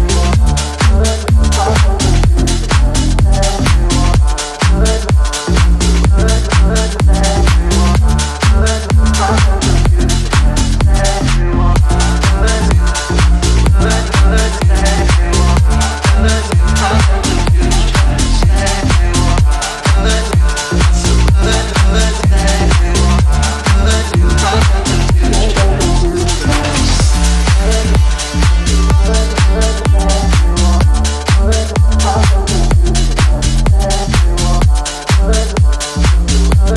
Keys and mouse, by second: 4.4 space, 4.5 click, 4.7 space, 5.2-15.0 drag, 19.2 ctrl+a, 19.6 ctrl+c, 20.1 click, 22.6 ctrl+a, 22.8 ctrl+v, 23.3 click, 25.1 ctrl+=, 25.3 space, 25.5 click, 25.7 space, 28.8-31.5 drag, 36.6 space.